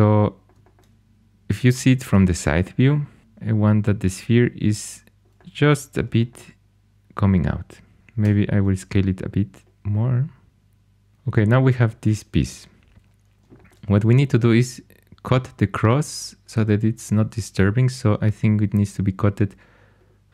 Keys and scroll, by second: 3.2 g, 8.2 s.